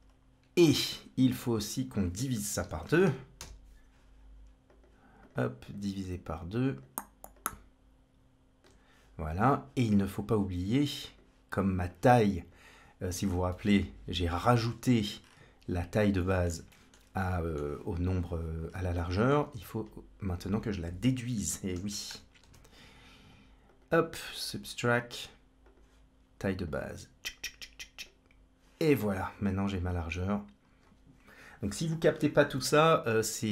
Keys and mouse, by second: 0.5 shift+a, 5.1 click, 5.5-6.7 drag, 7.2-8.5 ctrl+drag, 10.6-11.1 drag, 11.7 click, 13.3-14.5 middle drag, 16.0 middle click, 16.5 middle click, 17.1 middle click, 18.8 middle click, 19.3 shift+a, 24.3-25.6 drag, 26.5-27.9 drag, 29.4-31.9 drag, 32.8-33.3 drag.